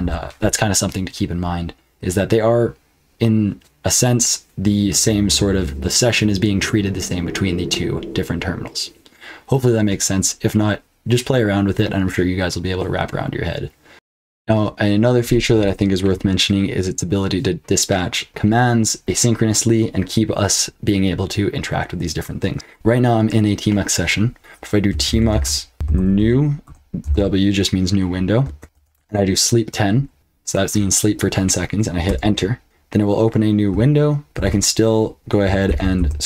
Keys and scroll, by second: 0.0 super+q, 13.9 F12, 15.5 q, 24.6-27.1 typing, 28.7 ctrl+f, 32.0 Return, 34.3 ctrl+t, 35.6 ctrl+b, 36.0 n.